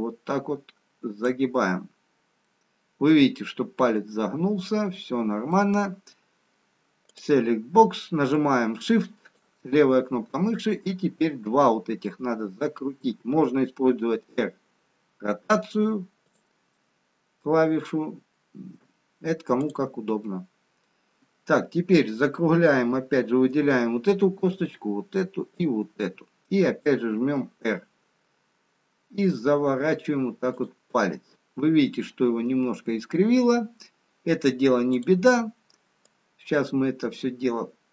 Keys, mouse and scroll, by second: 3.7 middle click, 8.1 click, 9.3 shift+click, 13.9 r, 18.6 middle click, 19.8 click, 20.3 middle click, 24.9 shift+click, 25.8 shift+click, 27.1 r, 31.1 middle click, 37.1 click.